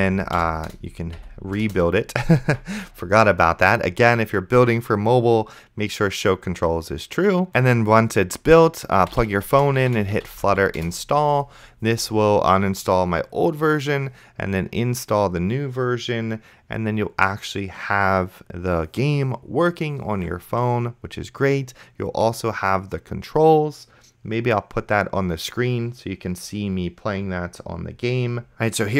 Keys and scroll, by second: 0.7 Return, 1.2 Up, 1.6 Return, 9.0-11.1 typing.